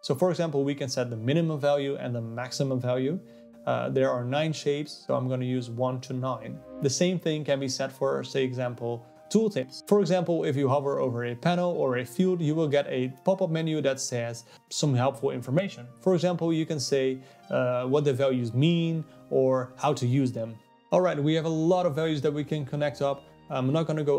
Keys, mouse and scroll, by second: 0.6-3.7 drag, 4.6-6.4 drag, 7.0 click, 7.5 click, 11.8 BackSpace, 11.9 BackSpace, 20.3-22.3 middle drag, 22.3-23.3 scroll down 2, 23.3-24.1 middle drag.